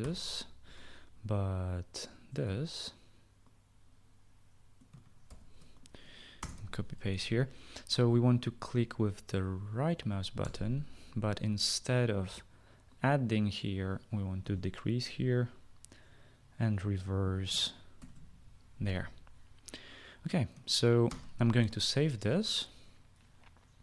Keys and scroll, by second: 0.0 ctrl+z, 0.6 ctrl+z, 5.8 ctrl+c, 6.9 Return, 7.1 ctrl+v, 11.0 1, 15.0 -, 21.6 ctrl+s.